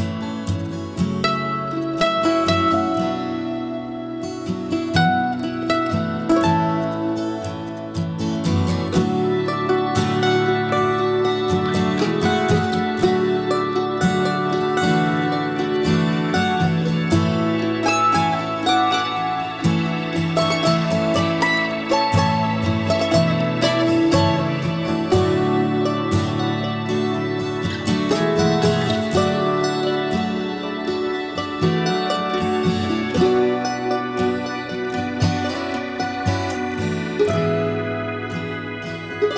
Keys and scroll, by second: 0.0 ctrl+h, 2.8 ctrl+g, 8.8 ctrl+g.